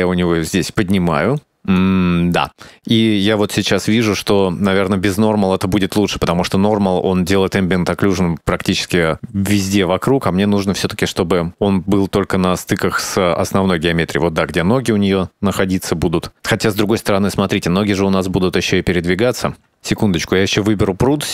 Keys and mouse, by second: 3.3 middle click, 4.1 middle click, 8.4-8.8 drag, 11.0 shift+middle click, 16.8 shift+middle click, 19.8 right click.